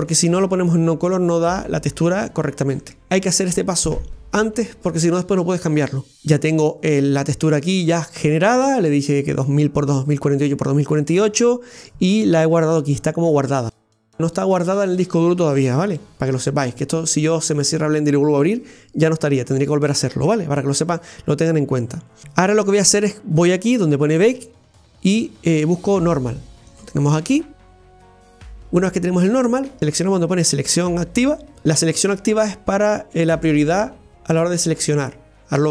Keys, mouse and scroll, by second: 30.7 click.